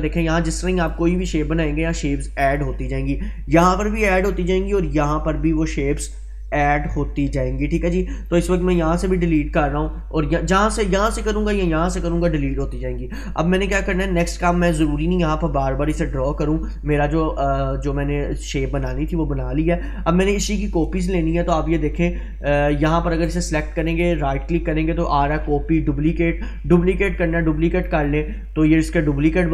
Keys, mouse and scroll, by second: 0.9-1.5 drag, 8.3 click, 8.5 Delete, 9.3 click, 9.7 Delete, 14.7 click, 22.7 click, 23.3 right click, 27.9 click.